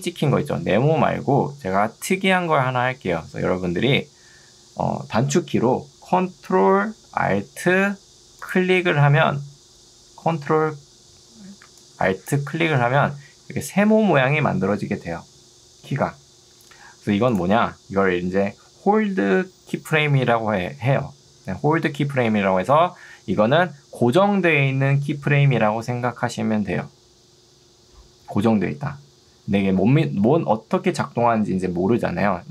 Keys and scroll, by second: 0.8 Escape, 11.6 ctrl+2, 16.2 Escape.